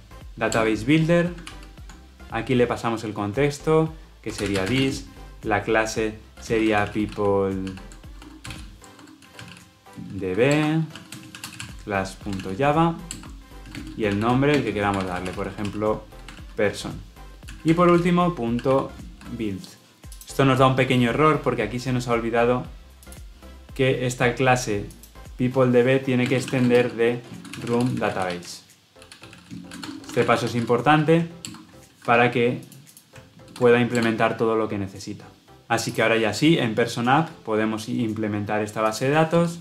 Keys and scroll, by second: 0.8 Return, 1.3 ctrl+p, 10.5 Return, 31.4 alt+Return.